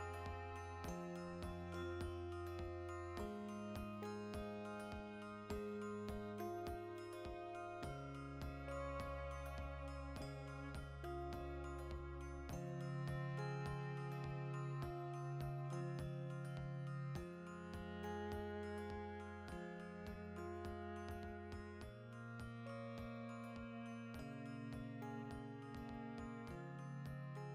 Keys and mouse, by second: 0.9 Left, 1.2 Right, 2.6 Left, 4.7 Right, 5.2 r, 5.8 click, 6.6-11.9 middle drag, 11.9 right click, 12.1-14.2 shift+middle drag, 12.8 r, 14.2 click, 14.7 g, 15.6 click, 16.1 alt+r, 16.7 ctrl+z, 17.7-19.6 shift+middle drag, 18.0 alt+q, 18.8 Tab, 19.5 2, 19.6 alt+right click, 20.2-21.7 shift+middle drag, 20.6 e, 21.7 click, 22.3 shift+middle click, 24.1 a, 24.3 shift+middle click, 24.8 r, 26.4 click, 26.8 g.